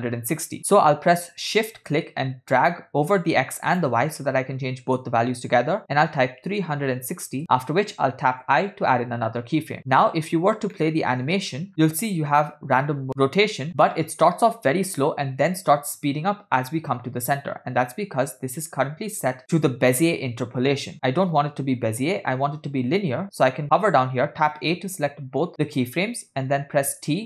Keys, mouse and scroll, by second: 1.9-7.4 shift+drag, 8.7 i, 9.9-10.7 scroll down 6, 10.8 middle click, 11.7-12.1 scroll down 2, 11.9 click, 11.9 space, 21.1 space, 24.5 a, 26.9 t.